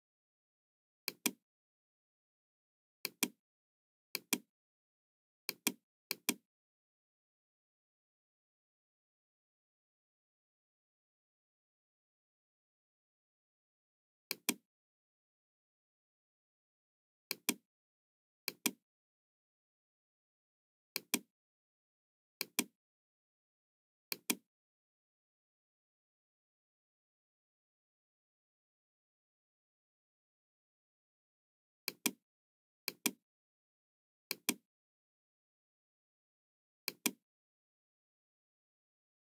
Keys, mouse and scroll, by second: 1.2 click, 3.0 click, 4.0 click, 5.3 click, 6.1 click, 6.5 middle click, 7.2-9.0 middle drag, 9.2 middle click, 9.6 middle click, 14.3 click, 17.2 click, 18.4 click, 20.8 click, 22.4 click, 24.0 click, 25.0-28.9 middle drag, 31.8 click, 32.8 click, 34.2 click, 35.9 middle click, 36.9 click.